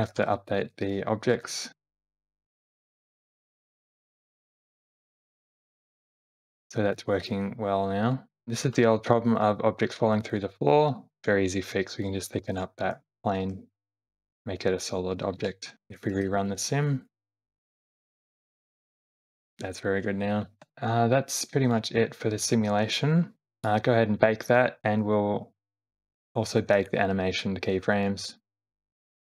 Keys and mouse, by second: 0.2 g, 1.4 ctrl+z, 3.0 space, 5.1 middle click, 6.5 shift+middle click, 7.0 shift+middle click, 8.4 space, 9.4-10.4 drag, 12.0 click, 12.9 Tab, 13.4 e, 15.4 Tab, 16.1 shift+Left, 16.5 space, 17.1 click, 18.4-19.8 middle drag, 20.4 space, 23.6 space, 23.8 click, 25.5 q.